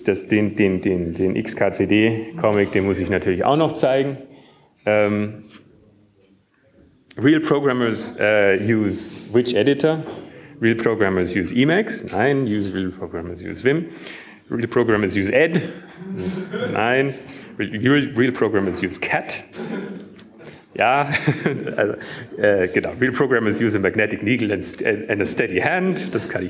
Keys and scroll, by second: 0.1 F5, 1.2 Escape.